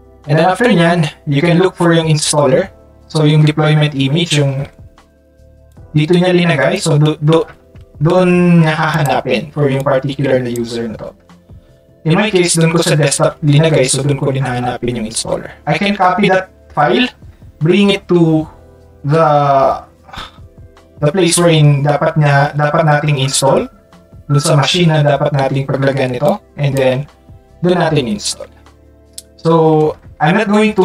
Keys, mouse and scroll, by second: 5.7-6.7 drag, 8.9 click, 9.8 click, 26.2 click, 30.7 ctrl+click.